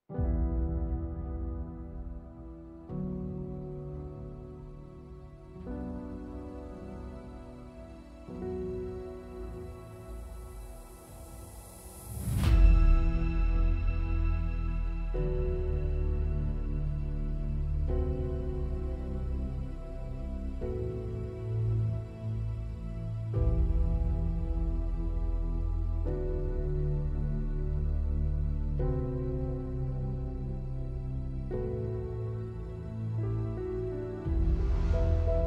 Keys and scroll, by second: 12.0 alt+6, 28.1 super+=.